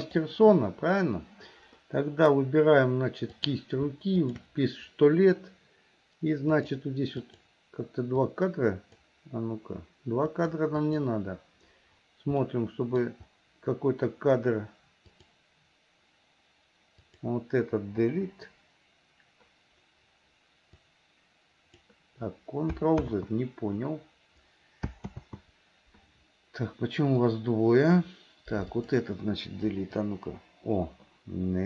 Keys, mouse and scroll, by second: 3.3 click, 4.3 shift+click, 6.6 click, 7.2 click, 8.3 click, 10.3 click, 10.9 click, 12.4 middle click, 15.2 click, 17.0 click, 18.1 Delete, 20.9-22.0 drag, 23.1 ctrl+z, 25.2 ctrl+z, 27.3 click, 28.7 click, 29.8 Delete.